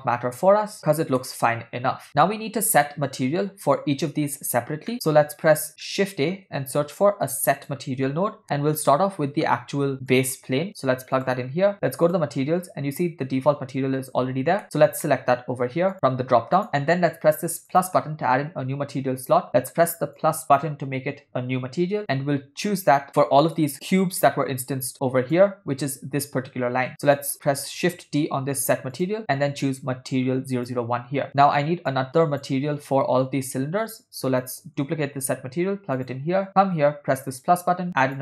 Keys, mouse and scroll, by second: 0.0-0.8 middle drag, 1.3-1.7 shift+middle drag, 4.9 middle click, 5.9 ctrl+middle click, 6.8 shift+a, 12.1 click, 14.6 ctrl+middle click, 15.1 middle click, 15.9 click, 17.7 click, 20.2 click, 22.0 middle click, 23.0 ctrl+middle click, 23.6 click, 24.0-25.4 drag, 27.1 click, 27.8 shift+d, 29.2-30.8 drag, 31.3 middle click, 31.9 click, 34.5 click, 35.3 shift+d, 37.3 click, 38.1 click.